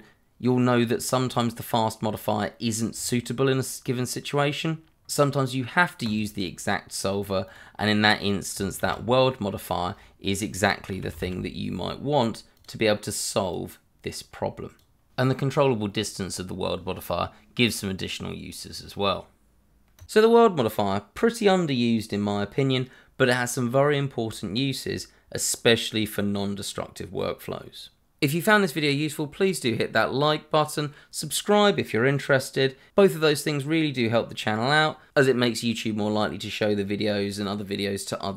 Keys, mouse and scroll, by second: 3.2-5.0 scroll up 1, 6.0 click, 8.8 shift+a, 10.9 w, 11.1 e, 11.2 l, 12.5 click, 15.2 scroll up 1, 15.7 click, 15.9 scroll down 1, 16.2 shift+middle click, 16.9 middle click, 17.0 shift+middle click, 19.6 scroll down 1, 20.1 middle click, 20.5 middle click, 20.9 shift+middle click, 29.9 middle click.